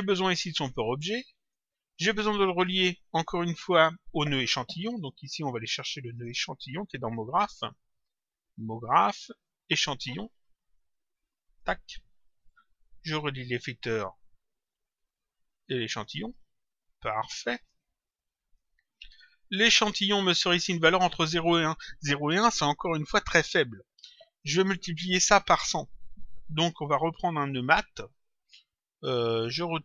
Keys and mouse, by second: 0.1 click, 1.3 click, 5.4 click, 8.5 click, 9.7 click, 12.4 click, 14.5 click, 16.6 click, 18.0 click, 19.3 click, 20.7 click.